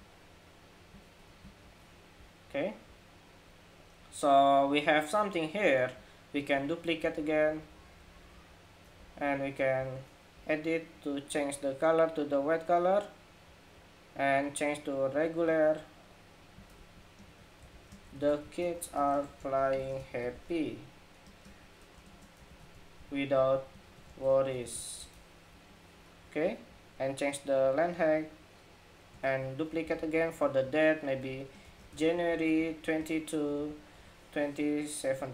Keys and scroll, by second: 6.2 super+d, 25.2 Escape, 28.9 super+d, 34.2 Escape.